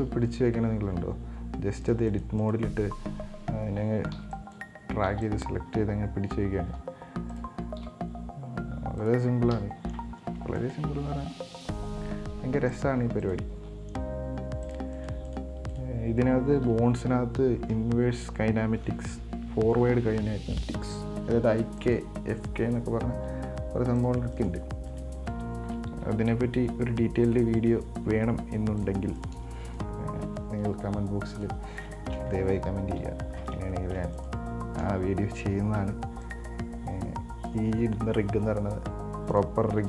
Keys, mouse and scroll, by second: 1.2 g, 2.6 right click, 4.4 b, 5.3 b, 7.0 r, 8.1 g, 9.8 KP_7, 10.8 right click, 11.8 g, 13.5 right click, 13.8 g, 15.2 right click, 16.0 right click, 22.0 right click, 23.3 g, 24.6 right click, 25.2 right click, 26.2 g, 27.8 right click, 28.3 g, 29.4 right click, 30.8 g, 31.9 scroll down 1, 32.1 shift+middle click, 33.1 KP_1, 33.9 shift+middle click, 34.4 right click, 36.0 b, 38.6 r.